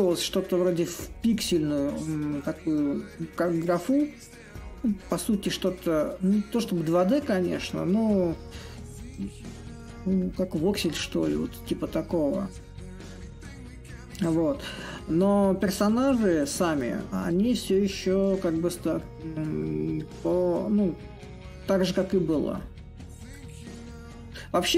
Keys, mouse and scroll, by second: 0.0-5.0 drag, 5.6-10.6 drag, 11.0-16.0 drag, 16.5-21.5 drag, 22.3-24.7 drag.